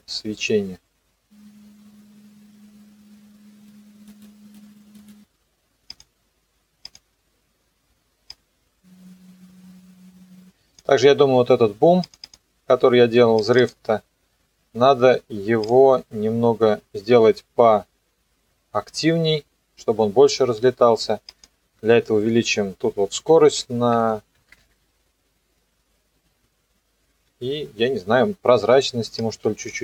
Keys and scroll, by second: 23.2 KP_2, 24.0 BackSpace, 24.4 KP_3, 24.6 KP_Enter.